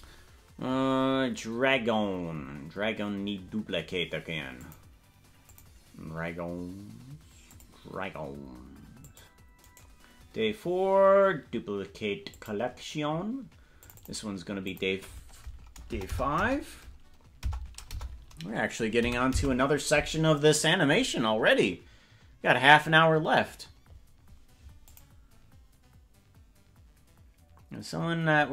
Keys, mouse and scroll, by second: 4.5 click, 5.4 click, 5.9-7.4 scroll down 1, 7.4 click, 7.4 scroll down 7, 8.9 click, 9.6-13.7 right drag, 13.7 click, 13.9-19.9 drag, 16.0 BackSpace, 24.8 click.